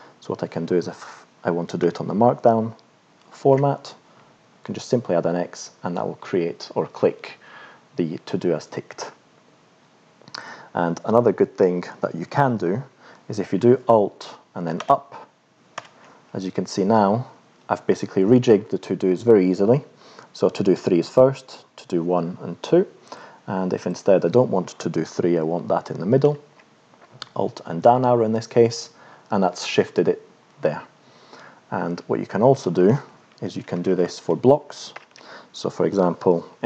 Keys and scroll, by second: 1.8 BackSpace, 3.6 x, 14.8 alt+Up, 15.7 alt+Up, 26.2 alt+Down, 33.5 shift+Up, 34.9 shift+Home.